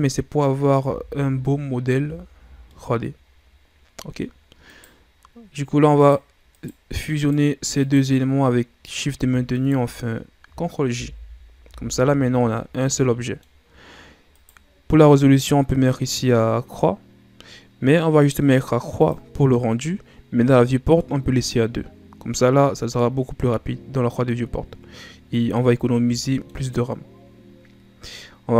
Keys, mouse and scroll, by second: 0.3-0.7 scroll down 3, 0.7 a, 1.7-2.2 scroll down 2, 2.2-2.6 shift+scroll up 1, 2.6-4.7 middle drag, 4.7 right click, 5.1-5.5 scroll up 2, 6.0 right drag, 6.5 right click, 7.1 right click, 7.8 right drag, 8.8 right click, 9.5 shift+right click, 11.0 ctrl+j, 11.6 a, 12.5-13.5 middle drag, 13.5-13.9 scroll up 3, 14.3 right click, 19.0-22.0 drag, 22.6 scroll down 4, 22.8-26.0 middle drag, 26.2 shift+scroll down 1, 26.3-26.8 middle drag, 26.8-27.2 scroll up 2.